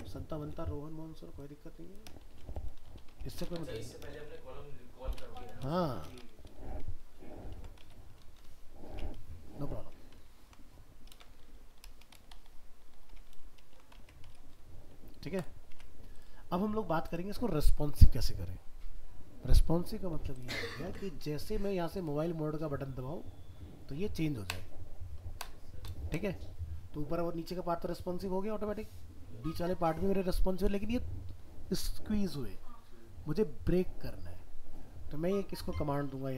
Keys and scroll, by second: 7.5 ctrl+s, 7.8 alt+Tab, 10.1 ctrl+z, 11.1 ctrl+c, 13.4 ctrl+v, 13.7 ctrl+s, 14.0 alt+Tab, 20.9 alt+Tab.